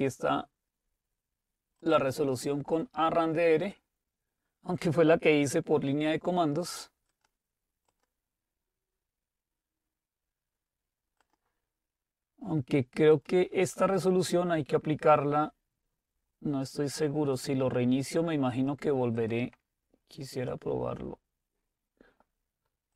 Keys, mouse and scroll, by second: 1.9 click, 7.2-9.5 drag, 11.3 click, 13.5 click, 18.6-22.0 drag.